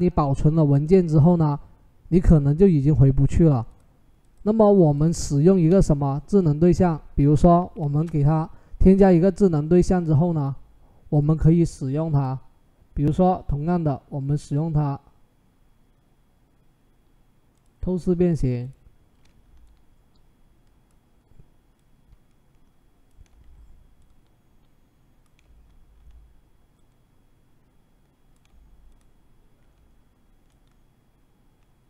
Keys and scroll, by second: 7.7 ctrl+shift+z.